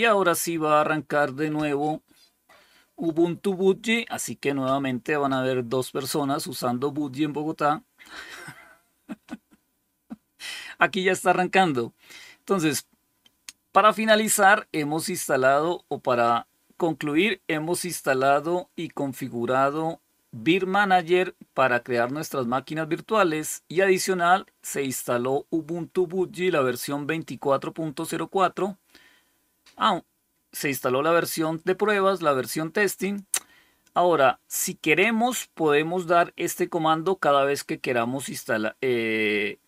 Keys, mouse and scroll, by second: 32.9 click.